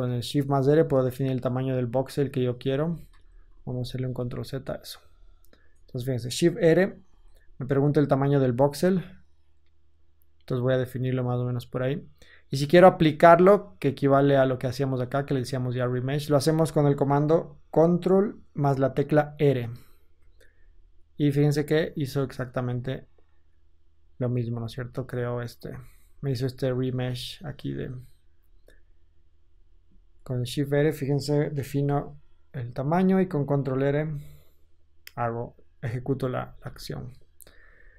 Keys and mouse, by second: 3.0 ctrl+z, 3.4 ctrl+z, 3.8 ctrl+z, 5.0 ctrl+Tab, 6.2 shift+middle click, 6.9 shift+r, 7.2-13.9 middle drag, 13.9-24.6 drag, 19.7 ctrl+r, 22.5 Tab, 24.6 Tab, 27.0 ctrl+z, 27.7 ctrl+z, 28.3 ctrl+z, 30.2 shift+e, 31.5 shift+r, 33.8 shift+r, 35.8 Tab, 36.3 Tab, 37.7 ctrl+z.